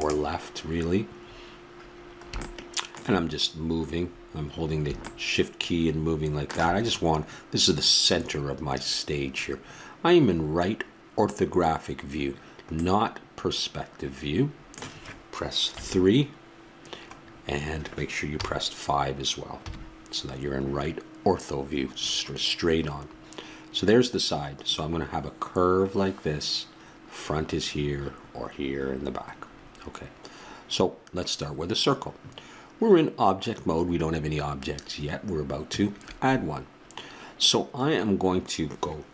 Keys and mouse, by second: 5.6-15.7 middle drag, 15.7 KP_3, 18.3 KP_5.